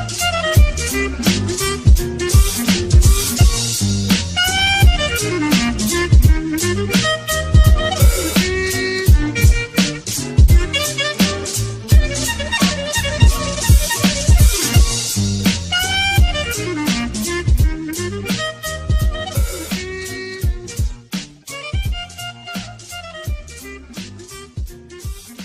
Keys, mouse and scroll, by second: 0.0 space, 0.8 space, 1.6 space, 5.0 space, 7.3 space, 7.5 space, 11.0 space, 16.4 space, 17.7 space, 18.8 right click, 18.9 ctrl++.